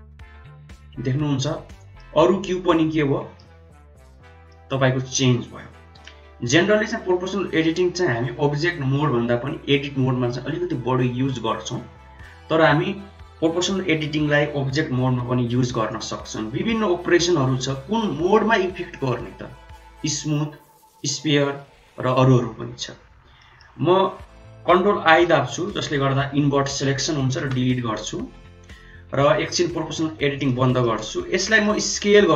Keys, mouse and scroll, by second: 1.8-3.3 middle drag, 4.4 middle click, 6.2 ctrl+z, 15.9-22.7 drag, 23.3 middle drag, 25.2 ctrl+i, 27.3 Delete, 29.0 click, 30.7 middle click, 31.3 middle drag, 31.8 s.